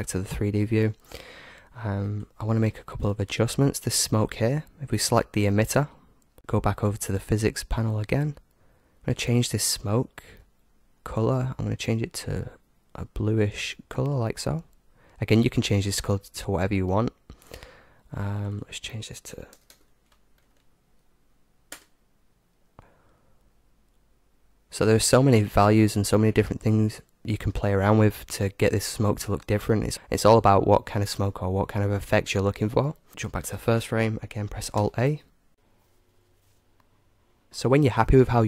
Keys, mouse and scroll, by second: 2.3-5.1 right drag, 7.2-15.8 drag, 18.3-20.3 drag, 33.1-35.2 drag, 34.8 alt+a.